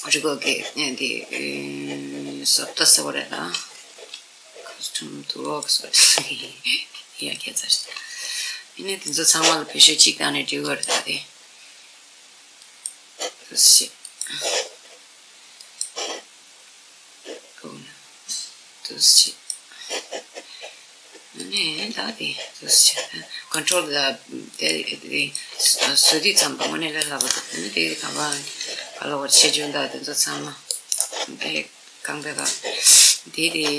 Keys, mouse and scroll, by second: 5.1-12.2 drag, 13.7-17.1 drag, 21.1 click, 21.6 r, 23.3 right click, 24.2-26.7 drag, 25.3 r, 26.9 right click, 27.9 click, 28.3 r, 30.6 right click, 31.9 click.